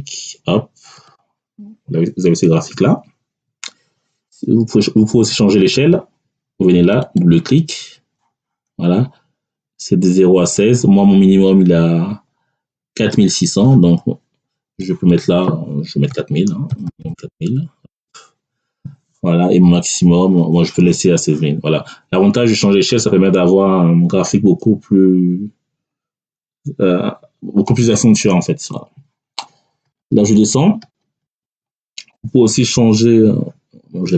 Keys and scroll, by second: 16.0 4, 16.6 0, 17.8 Return.